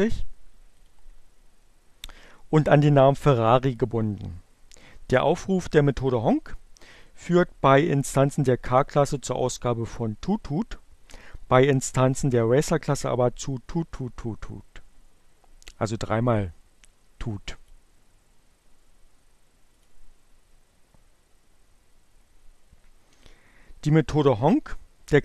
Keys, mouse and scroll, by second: 0.6 click, 15.9-17.2 drag, 19.8 click.